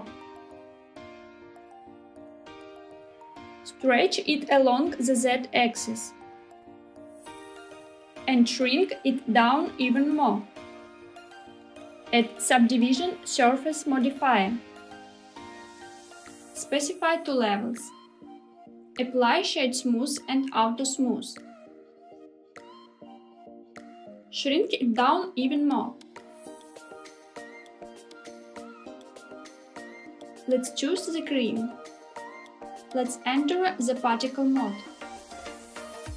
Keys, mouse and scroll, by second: 2.7 click, 3.3 s, 4.2 z, 7.9 click, 8.1 middle click, 8.1 scroll up 1, 8.4 s, 11.6 click, 12.3-16.2 drag, 17.2 click, 18.9-20.7 right drag, 21.1 click, 23.7 click, 24.7 s, 28.5 s, 29.6 click, 30.1 click, 36.0 click.